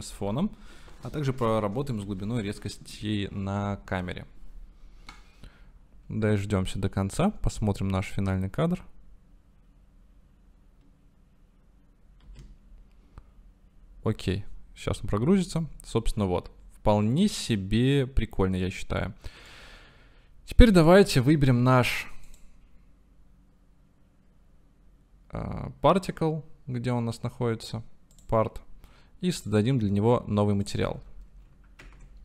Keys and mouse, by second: 13.3 space, 20.1-21.6 drag, 22.4 click, 28.2 click, 29.5 click, 30.7-31.8 drag.